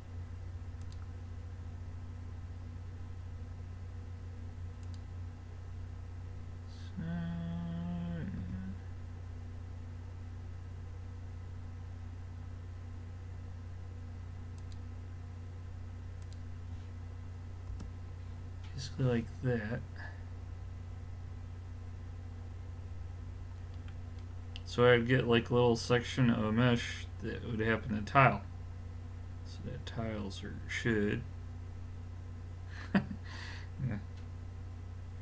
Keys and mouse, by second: 23.6-29.1 middle drag.